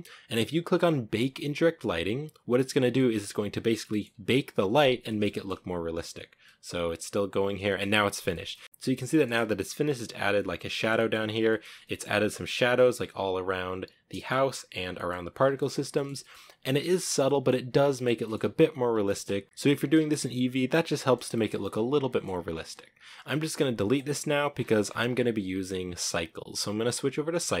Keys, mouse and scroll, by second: 1.8 click, 2.8 scroll down 1, 2.9-3.6 middle drag, 3.6 scroll up 2, 3.8-4.2 middle drag, 4.2-4.7 scroll up 3, 5.0-10.5 middle drag, 10.5 scroll down 1, 10.7-11.1 shift+middle drag, 11.1-11.4 scroll up 3, 11.4 middle click, 11.6 scroll down 1, 11.8-12.5 shift+middle drag, 12.5 scroll down 1, 12.7-14.2 middle drag, 14.2-14.9 scroll up 1, 14.9-15.3 shift+middle drag, 15.3 scroll down 3, 15.5-16.7 shift+middle drag, 16.7 scroll down 1, 16.8 shift+middle drag, 17.0 scroll up 1, 17.2-17.7 middle drag, 17.7 scroll down 2, 17.8 middle drag, 18.0 scroll up 1, 18.1 shift+middle click, 18.8 scroll down 1, 19.0 space, 19.4-20.7 middle drag, 20.7 scroll down 2, 20.9-23.6 middle drag, 23.6 x, 24.5-25.3 scroll up 17, 25.6-27.6 drag.